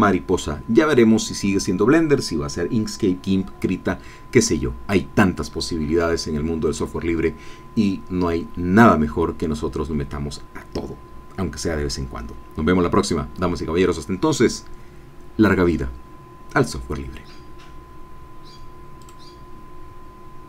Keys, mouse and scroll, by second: 19.0 click.